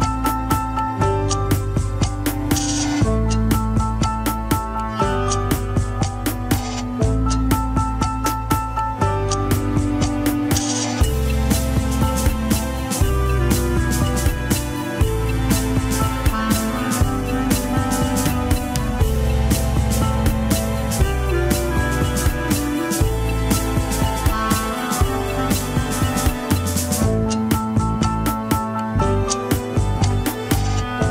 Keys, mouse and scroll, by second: 0.4 click, 0.8 g, 1.7 click, 1.9 g, 2.6-4.5 shift+middle drag, 4.5 click, 6.0 shift+middle click, 6.4 click, 7.1 shift+click, 8.1 click, 8.5-9.7 shift+middle drag, 9.7 g, 10.8 click, 12.0 shift+click, 12.4 g, 13.6 click, 14.3 shift+click, 14.7 g, 15.6 click, 16.2 shift+click, 16.6 g, 19.9 click, 20.4 shift+click, 20.9 r, 22.2 click, 22.9 shift+click, 23.3 r, 24.6 click, 25.3 shift+click, 25.7 r, 26.7 click, 27.2 shift+click, 27.4 shift+click, 27.7 shift+click, 28.2 g, 29.7 click, 30.1 shift+click, 30.4 shift+middle click, 30.6 scroll up 1, 30.8 r.